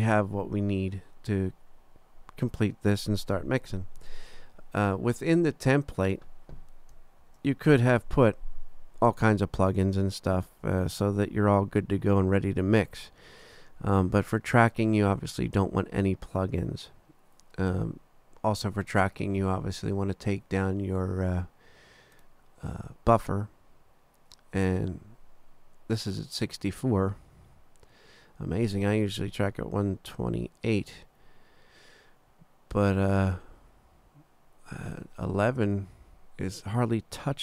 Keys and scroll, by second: 7.2 super+=.